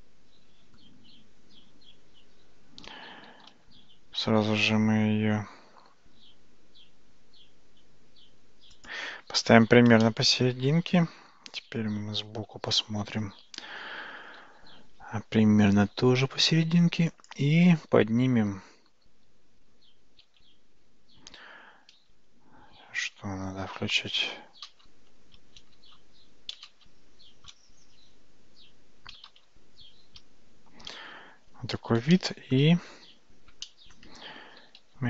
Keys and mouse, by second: 3.4 g, 10.1-11.3 middle drag, 14.3 g, 20.5 alt+z, 23.5 ctrl+z, 24.7 ctrl+shift+z, 26.2 ctrl+z, 27.5 ctrl+shift+z, 30.1 shift+z, 32.2-32.6 shift+middle drag, 33.7 shift+middle click, 34.7 g.